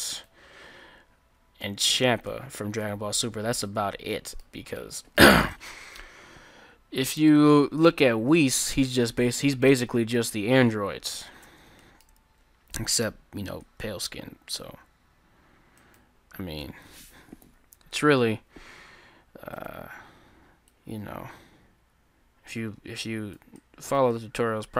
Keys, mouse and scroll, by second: 1.6-3.8 middle drag, 4.0-5.5 middle drag, 5.6-6.6 middle drag, 8.4-11.9 middle drag, 11.5 Tab, 13.0 click, 13.0 right click, 13.6 Tab, 13.6 click, 13.6 right click, 14.7 s, 17.5 alt+o, 18.5 s.